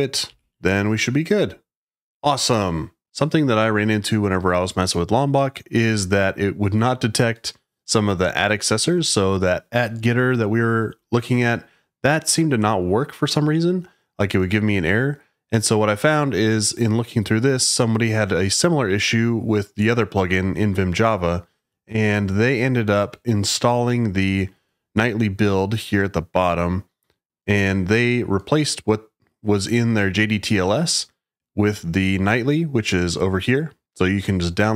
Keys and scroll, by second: 0.0-0.8 typing.